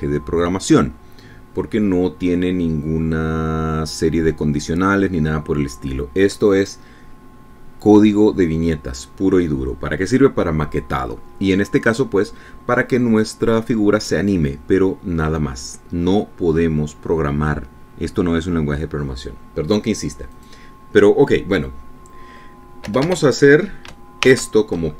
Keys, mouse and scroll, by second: 21.5 click, 24.0 BackSpace.